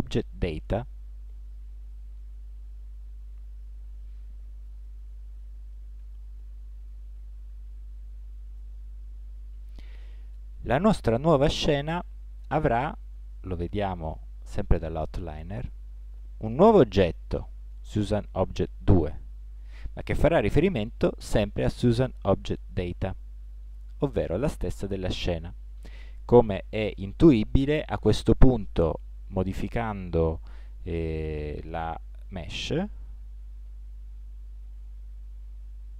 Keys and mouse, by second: 14.0-15.7 drag, 15.7-19.5 middle drag, 19.5-21.3 drag, 21.3 middle click, 29.2 Tab, 34.0 s.